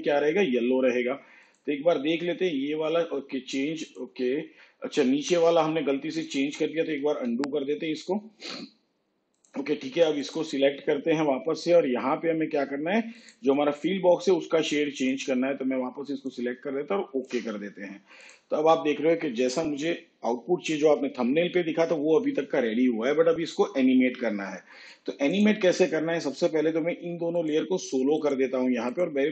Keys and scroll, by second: 6.7 ctrl+z.